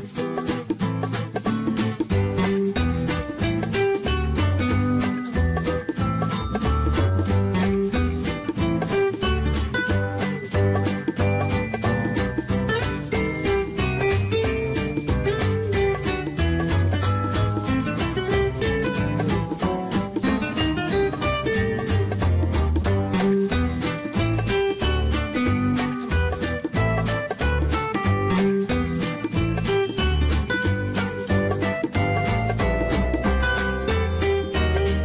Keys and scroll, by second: 30.6 Escape.